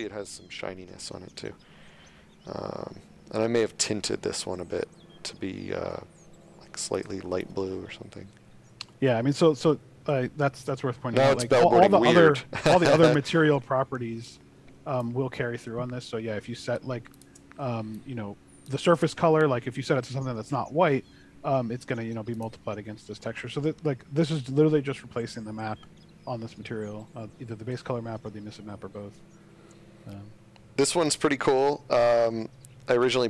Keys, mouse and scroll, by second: 7.4 click, 15.5 space, 17.1 click, 17.9 click, 22.3 click, 31.0 click.